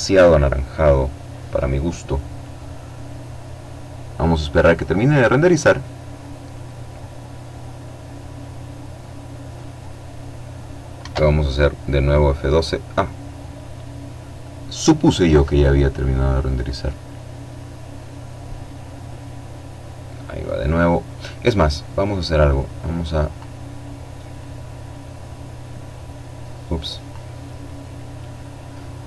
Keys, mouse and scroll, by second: 9.6 F12, 21.4-22.5 drag, 23.0-26.2 drag.